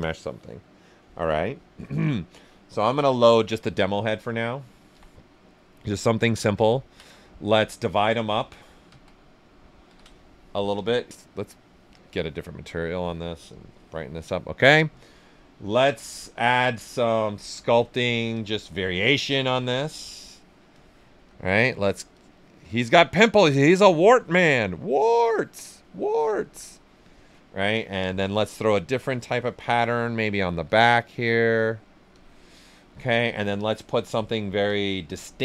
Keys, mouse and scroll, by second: 2.9 click, 4.9 ,, 4.9 ., 5.1 right click, 8.8 ctrl+d, 10.7 click, 12.4 right click, 13.5 click, 14.2 alt+right click, 16.0 b, 17.1-17.9 typing, 18.3 click, 21.1 s, 21.2 click, 22.1 click, 23.0 click, 23.5 right click, 24.1 alt+click, 27.0-29.0 drag, 30.0 right click, 30.6 click, 31.1 right click, 31.5 click, 32.7 alt+right click, 33.6 click.